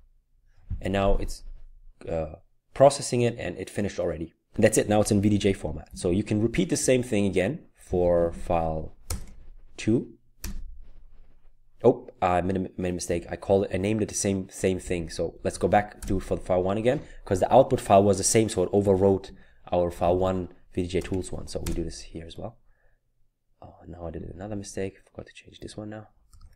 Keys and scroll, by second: 5.9 Up, 6.8 Left, 7.5-9.2 typing, 10.4 typing, 13.1 Up, 13.7-16.0 typing, 18.9 Up, 19.2-21.6 typing, 24.1-25.5 typing.